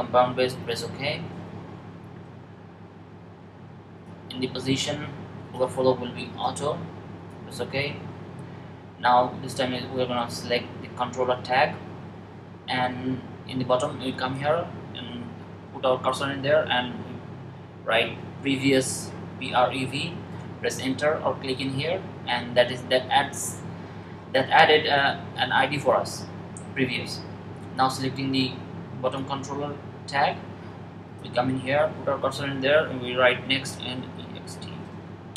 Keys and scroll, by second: 17.6-18.9 typing, 33.2 n, 34.2-35.2 typing.